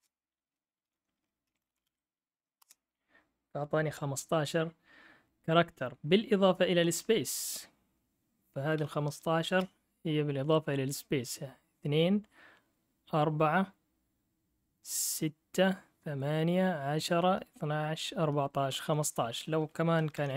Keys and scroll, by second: 0.0-2.4 typing, 2.6 Return, 6.1-7.6 typing, 8.8 Up, 9.5 Return, 20.1 Down, 20.3 Down.